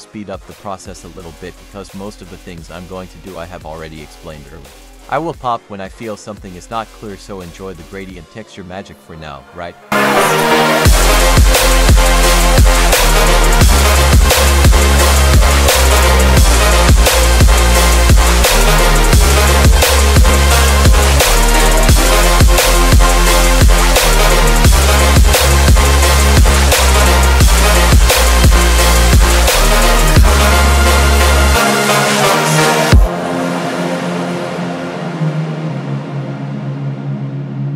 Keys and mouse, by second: 4.0 click, 4.4 F3, 6.4 click, 7.1 drag, 8.6 click, 10.1 ctrl+t, 17.6-18.4 drag, 18.8-19.1 drag, 24.1 click, 25.5 click, 27.6 click, 28.4 click, 32.0 click, 33.8 click, 36.0-37.7 drag.